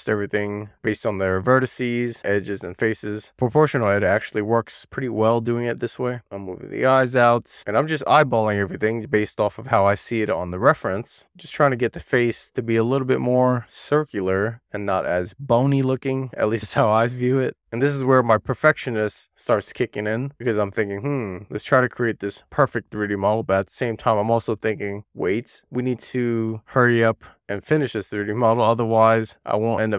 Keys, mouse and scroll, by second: 1.0 click, 3.8 scroll down 1, 4.0 middle click, 5.7 click, 6.0 alt+z, 6.1 click, 6.4 alt+z, 8.1 super+z, 8.6 click, 9.1 click, 9.5 alt+z, 10.5 super+z, 11.1 alt+z, 11.4 click, 12.8 middle click, 13.9 middle click, 14.7 scroll up 2, 15.0 click, 15.8 click, 16.1 click, 16.5 scroll up 2, 16.7-18.0 scroll down 7, 18.4 super+z, 19.1 click, 19.5 super+z, 19.9 super+z, 20.2 click, 21.1 super+z, 22.3 click, 22.5 click, 23.0 click, 24.0 super+z, 24.4 click, 24.7 super+z, 24.8 click, 25.3 middle click, 26.4 middle click, 26.8 scroll down 1, 27.0 middle click, 27.6 middle click, 28.0 shift+middle click, 28.1 a, 28.7 click, 29.2 middle click, 29.8 scroll down 2.